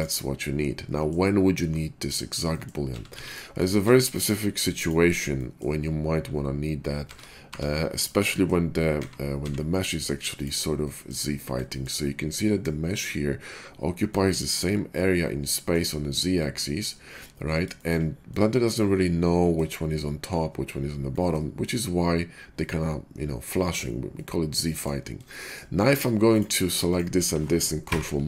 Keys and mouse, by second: 0.0 click, 2.8 a, 3.0 x, 3.2-3.8 drag, 3.6 shift+a, 7.0 shift+d, 8.0-12.5 drag, 8.9 s, 12.5-16.5 middle drag, 16.5 drag, 16.8 middle click, 16.8-17.6 drag, 17.4 middle drag, 17.6-18.9 shift+middle drag, 18.5 click, 18.7 drag, 18.9 drag, 19.1-24.9 middle drag, 24.9-25.2 drag, 25.2-27.6 shift+middle drag, 27.6 ctrl+click, 27.8 ctrl+KP_Subtract, 28.1-28.2 middle drag.